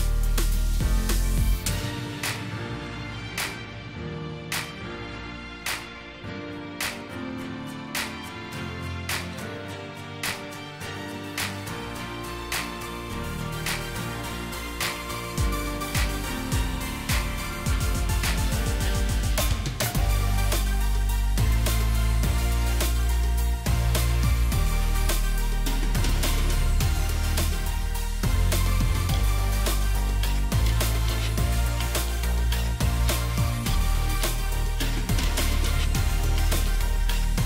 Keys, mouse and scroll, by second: 0.8 shift+click, 0.9 ctrl+g, 6.7-8.2 scroll up 1, 8.2 Delete, 10.1 Delete, 10.4 alt+shift+click, 15.3 alt+shift+click, 24.1 shift+click, 26.0 double click, 28.5 alt+shift+click, 33.5 alt+shift+click, 35.2 shift+click.